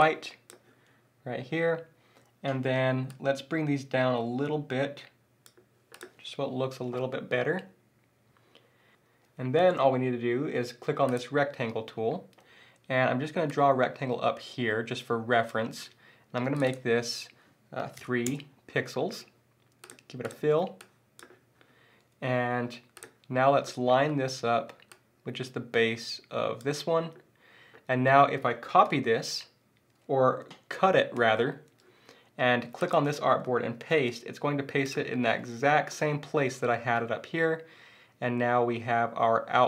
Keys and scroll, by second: 28.8 super+c, 31.1 super+x, 33.9 super+v.